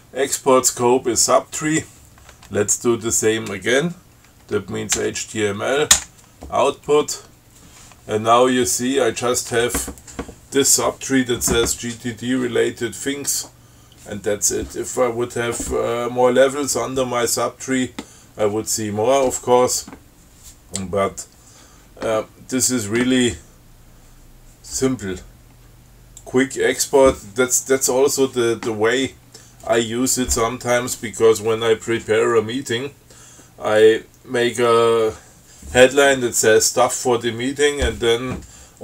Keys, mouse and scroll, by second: 5.2 h, 6.2 o, 26.5-27.3 drag.